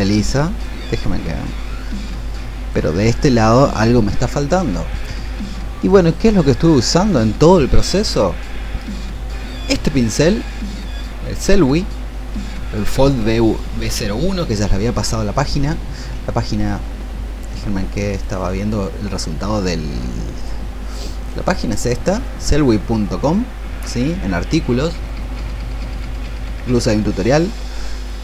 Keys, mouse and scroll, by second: 16.8 click, 18.3 click.